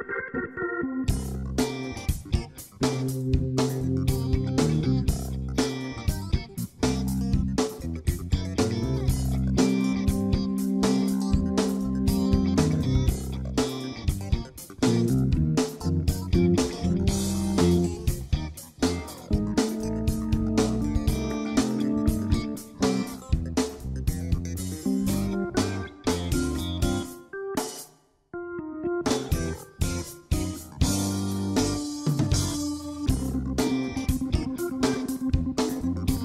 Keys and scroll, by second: 17.4-20.0 typing, 21.3-23.9 typing, 25.6-28.0 typing.